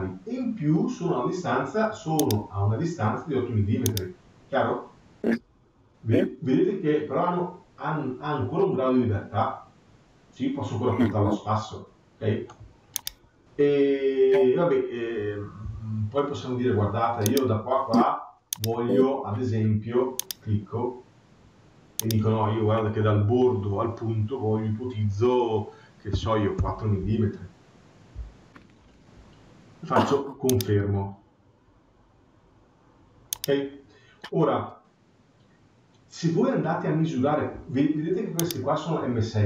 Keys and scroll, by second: 26.4 Return.